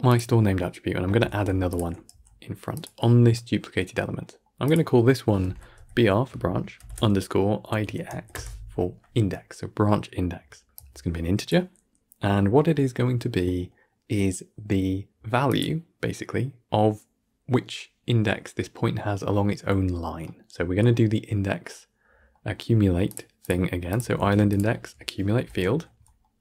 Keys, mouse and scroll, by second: 0.0-1.2 drag, 11.4-24.1 drag.